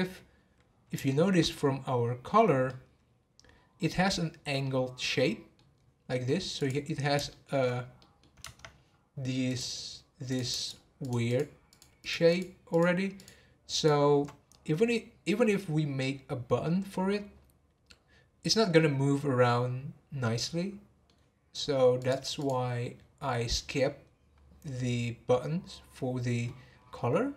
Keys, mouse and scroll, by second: 1.1 shift+middle click, 1.4 scroll up 1, 1.9 scroll down 1, 2.7-5.7 middle drag, 5.7-6.2 scroll up 1, 6.2 middle click, 6.5 click, 6.8 scroll up 1, 7.3-8.4 shift+middle drag, 8.4 Tab, 9.4 click, 10.6 shift+click, 11.0 shift+click, 11.2 shift+click, 11.7 shift+click, 12.0 shift+click, 12.3 shift+click, 12.7 shift+click, 13.2 shift+click, 13.7 shift+click, 20.2-22.0 middle drag, 22.0 click, 22.9-23.4 scroll down 6, 23.6-24.0 middle drag, 24.0-24.4 scroll up 4, 26.8 scroll down 1.